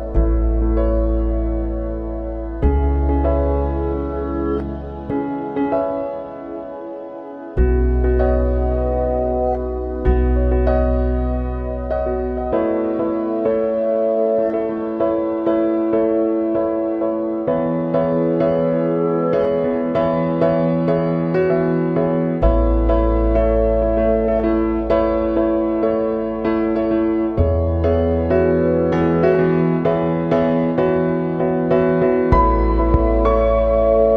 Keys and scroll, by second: 25.9 ctrl+z, 28.5 ctrl+z.